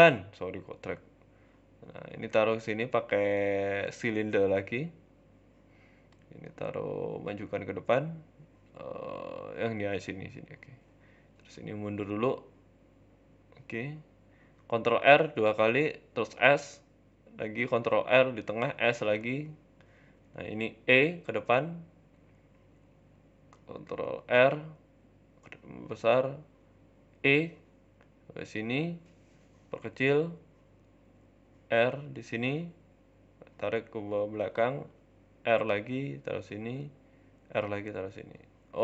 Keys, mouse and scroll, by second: 0.7 s, 1.5 g, 2.4 s, 3.5 g, 3.9 s, 4.4 Tab, 4.7 shift+middle click, 5.0 z, 5.7 click, 6.5 g, 11.3 click, 12.0 g, 13.6 scroll up 4, 13.8 shift+middle click, 14.1-14.5 scroll down 2, 14.5 ctrl+r, 16.4 s, 17.2 ctrl+e, 17.7 ctrl+r, 18.7 s, 19.9 shift+middle click, 20.2 click, 21.4 e, 22.9 ctrl+r, 24.5 s, 26.1 click, 27.2 shift+middle click, 31.1 shift+middle click, 31.6 ctrl+r, 33.4 s, 35.3 ctrl+r, 36.0 s, 36.9 ctrl+r, 37.5 s, 38.7 click.